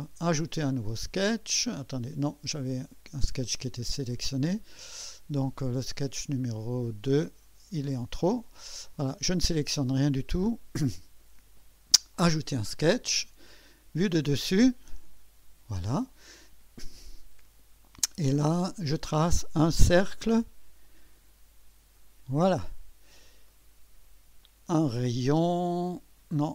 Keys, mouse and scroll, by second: 0.0-2.1 drag, 7.2 click, 7.9 Delete, 9.1 click, 11.6 click, 13.6 click, 14.8 click, 18.7 click, 20.8 click, 22.0 click, 24.4 click.